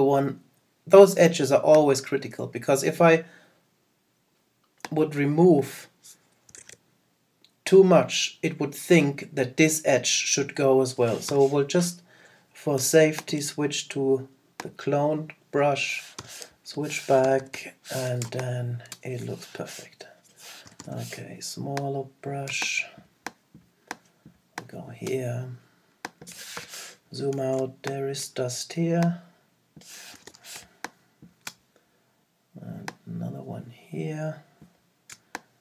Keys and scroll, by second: 6.6 super+z, 17.2 super+-, 26.5 super+0, 27.6 super+space.